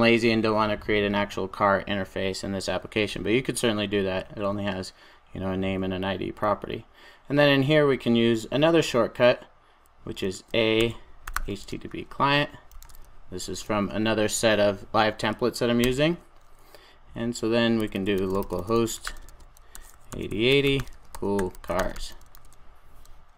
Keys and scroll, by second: 15.9 Return, 22.3 super+s.